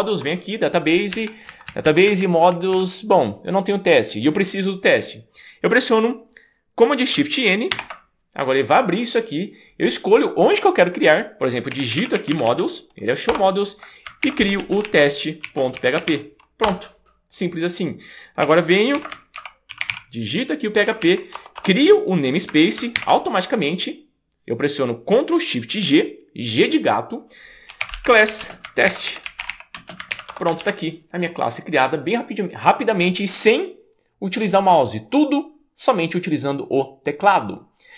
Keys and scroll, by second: 1.2 Right, 1.7 Down, 1.8 Down, 2.1 Right, 2.5 Down, 2.7 Down, 7.7 shift+super+n, 11.5-13.0 typing, 14.0-16.6 typing, 16.6 Return, 18.7-20.4 typing, 20.8 Left, 21.3 Right, 21.3 Return, 21.6 Return, 23.0 shift+super+g, 27.5-30.1 typing, 30.3 Return, 30.6 super+s.